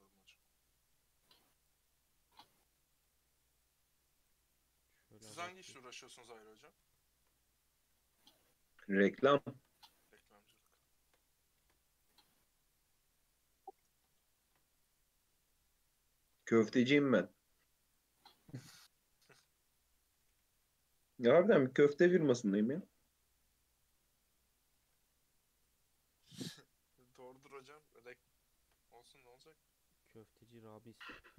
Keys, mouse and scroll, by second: 0.6-1.2 middle drag, 1.2 click, 2.1-4.2 middle drag, 4.2 click, 4.8-5.9 middle drag, 5.9 scroll down 1, 6.2-7.3 middle drag, 7.3 scroll up 1, 7.4-8.6 middle drag, 8.6 KP_3, 8.8-9.4 scroll down 3, 9.4 shift+middle drag, 9.6-10.1 shift+scroll up 4, 10.1 Tab, 10.9 shift+middle click, 11.1-11.6 scroll up 2, 11.6 ctrl+r, 14.4 ctrl+r, 16.6 ctrl+r, 19.2 1, 19.4 alt+z, 19.7 click, 20.3 g, 21.2 Tab, 21.4 z, 21.6-22.2 scroll down 2, 22.2 alt+z, 22.5-23.2 scroll down 3, 23.2-23.9 middle drag, 23.9-24.3 scroll up 2, 24.3-25.0 middle drag, 25.0 Tab, 25.4 Tab, 25.6-25.9 middle drag, 25.9-26.7 scroll down 2, 26.7 KP_3, 28.4-28.9 shift+middle drag, 28.9 Tab, 29.2 alt+z, 29.8 click, 31.2 shift+click.